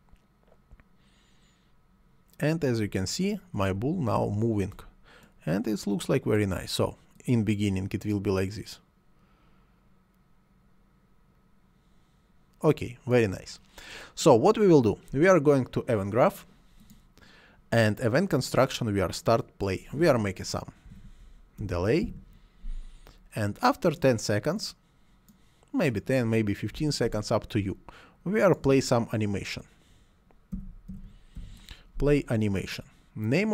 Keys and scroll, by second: 20.8 d, 21.5 BackSpace, 21.7 e, 22.0 a, 26.4-27.4 typing, 30.2-31.8 typing.